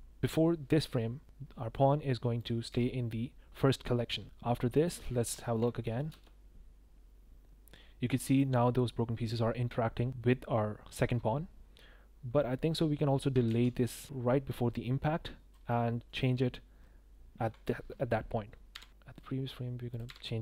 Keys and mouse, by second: 2.3 click, 2.7 i, 4.7 drag, 5.4 shift+middle drag, 5.6 middle click, 6.1 space, 8.1 space, 8.4 middle drag, 13.4 ctrl+z, 14.0 ctrl+z, 14.0-15.5 drag, 15.7-16.1 drag, 18.7 i, 18.9 click, 19.9 click, 20.0 i.